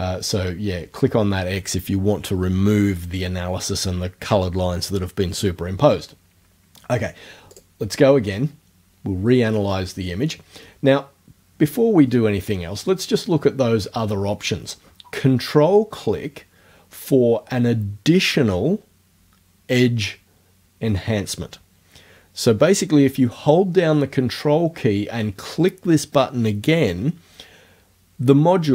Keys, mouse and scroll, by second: 7.5 click.